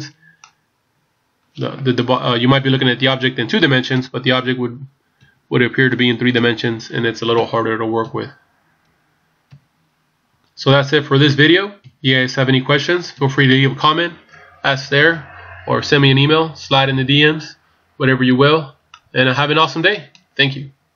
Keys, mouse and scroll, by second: 3.9 KP_3, 4.2 KP_1, 5.2 KP_7, 5.9 KP_8, 13.2 KP_1, 18.8 scroll down 1, 19.1 middle click.